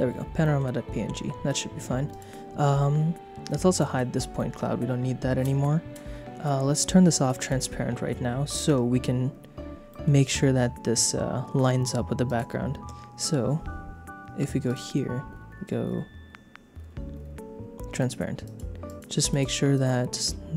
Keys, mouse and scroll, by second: 0.4 middle click, 2.1 click, 3.7 click, 4.3 middle click, 7.4 click, 8.6 KP_0, 9.9 shift+middle click, 12.2 click, 14.6 click, 18.0 click, 18.4 click, 18.9 click, 19.3 click, 19.7 click.